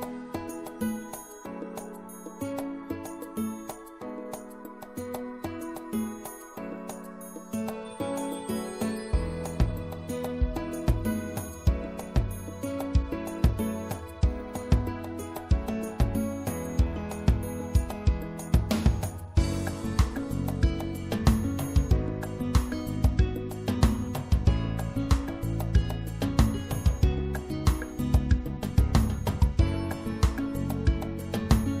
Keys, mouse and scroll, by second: 2.6-4.2 middle drag, 4.2 click, 8.9-10.8 drag, 11.6-13.4 drag, 13.5 ctrl+z, 14.7-16.6 drag, 18.0-21.4 right drag, 20.5-22.3 drag, 22.8-24.5 right drag, 23.7-27.0 drag, 28.5-31.8 drag, 29.5 right click.